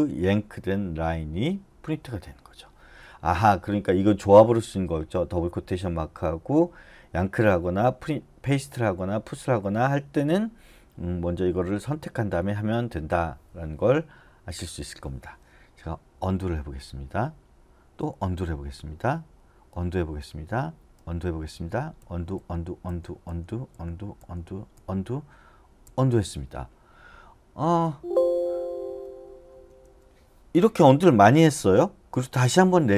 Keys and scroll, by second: 16.2 u, 22.3 u, 23.3 u, 23.7 u, 24.7 u, 25.8 u, 27.9 Escape, 29.5 d, 29.8 d, 32.0-32.9 typing.